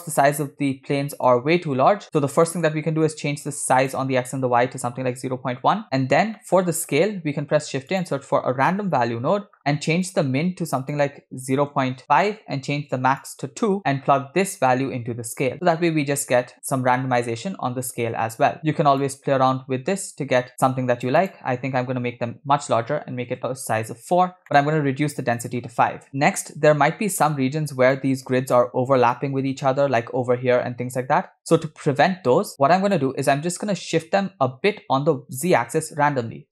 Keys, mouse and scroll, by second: 1.4 click, 2.5 middle click, 2.7 scroll up 2, 3.5-5.7 shift+drag, 6.4 middle click, 7.1 shift+a, 10.9-12.3 drag, 13.2 click, 14.7-15.5 drag, 19.1-23.4 shift+drag, 24.4 middle click, 25.5 click, 27.5-29.0 scroll up 6, 28.0-28.3 shift+middle drag, 29.2-29.7 shift+middle drag, 31.5-31.9 scroll down 3, 32.7-33.0 scroll down 4, 33.0 middle click, 36.1 shift+a.